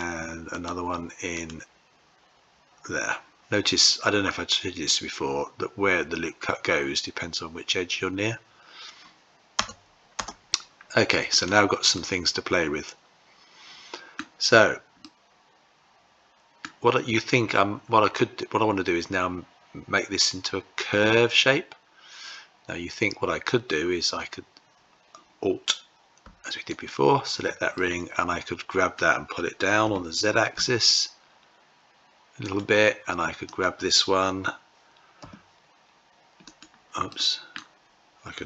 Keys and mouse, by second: 0.4-10.7 right drag, 11.1 click, 11.9-14.0 middle drag, 14.8-16.4 middle drag, 27.5-28.7 middle drag, 29.6 g, 33.2 click, 35.0 g, 36.8 middle click.